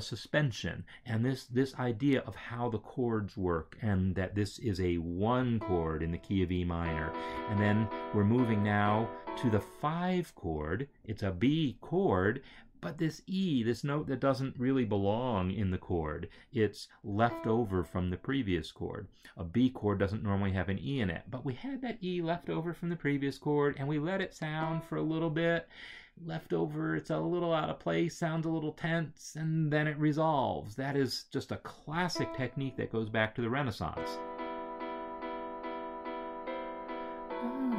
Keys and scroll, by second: 6.6 Right, 8.7 Right, 17.0 Right, 33.7 space.